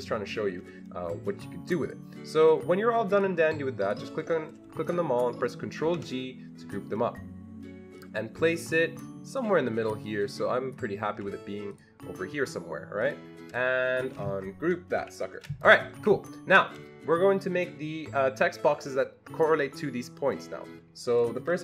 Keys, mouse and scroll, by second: 1.8 click, 1.8-3.2 ctrl+scroll up 1, 3.2-4.9 drag, 4.9-9.0 ctrl+drag, 5.8 ctrl+g, 9.0-10.1 drag, 10.1-13.0 shift+drag, 13.0-15.0 shift+drag, 15.0 ctrl+shift+g, 16.0 Escape.